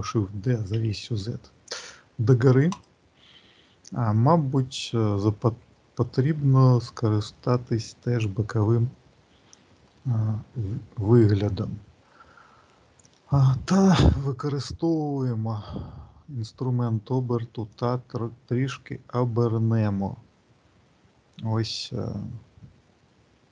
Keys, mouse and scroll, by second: 5.6 shift+middle click, 6.3 alt+middle click, 7.0 alt+middle click, 9.0-9.8 scroll up 2, 9.8 shift+middle click, 13.8 click, 17.6 click.